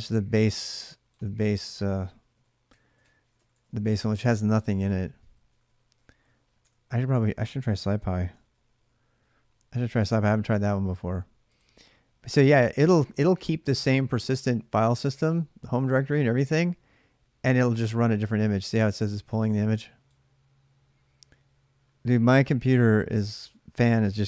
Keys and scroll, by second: 2.1 Right, 2.5-5.3 typing, 6.1 Right, 6.4-9.0 typing.